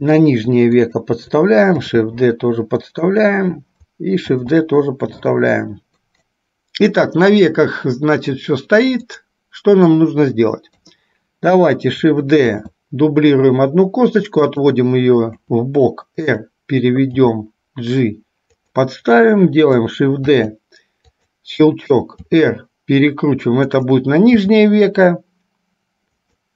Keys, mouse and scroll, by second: 2.0 shift+d, 4.5 shift+d, 9.1 click, 10.8 KP_3, 12.6 shift+d, 15.5 r, 17.2 g, 20.3 shift+d, 22.3 r, 24.5 g.